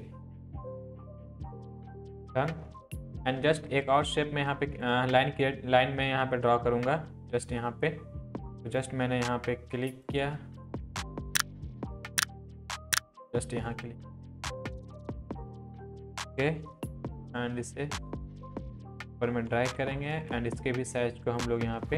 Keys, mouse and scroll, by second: 0.4 ctrl+z, 0.9 Down, 3.0 click, 8.7 click, 12.8 click, 15.4 click, 16.8 Up, 21.3-21.9 drag.